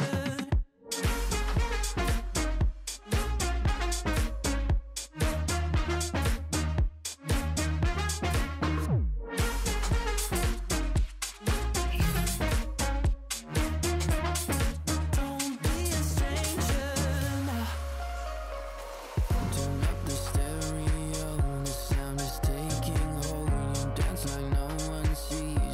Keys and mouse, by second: 1.7 click, 3.3 click, 9.1 alt+Tab, 10.3 alt+Tab, 11.9-14.8 typing, 16.1 click, 16.7 KP_2, 16.9 Return, 17.3 click, 18.4 click, 18.6 ctrl+click.